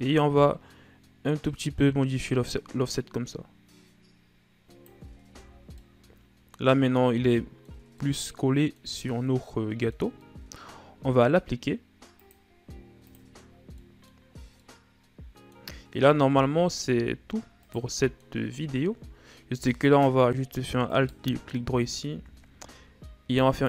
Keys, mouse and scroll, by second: 5.8 a, 6.0 scroll down 1, 6.2-12.7 middle drag, 12.7-14.0 drag, 14.0 scroll down 2, 14.3-14.9 middle drag, 14.9 scroll down 1, 15.1-16.2 middle drag, 16.2-16.6 scroll up 4, 16.6-17.1 middle drag, 17.1-18.1 shift+scroll up 8, 18.1 right click, 18.5-19.1 middle drag, 19.1 Tab, 20.3 alt+right click, 21.4 alt+right click, 22.6 ctrl+e.